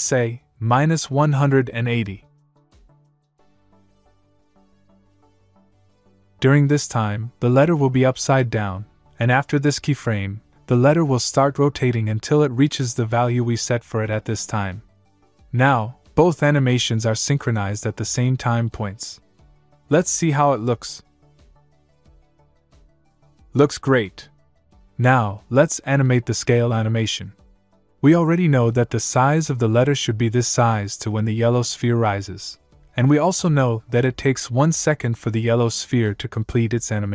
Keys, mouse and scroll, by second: 0.4 click, 0.4 click, 8.1 click, 10.1 click, 13.9 click, 20.2 click, 21.1 space, 24.0 space, 24.9 click, 27.7 click, 27.7 click, 30.5 click.